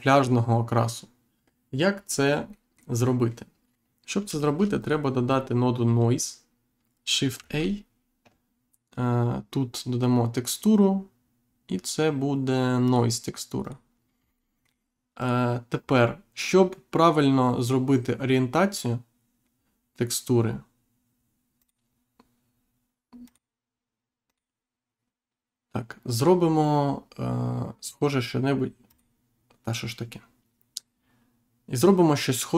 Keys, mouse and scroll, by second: 2.4 middle click, 4.7 click, 7.3 shift+a, 12.8 click, 13.5 click, 14.3 middle click, 15.1 click, 21.5 click, 23.2 click, 24.2 click, 28.8 click.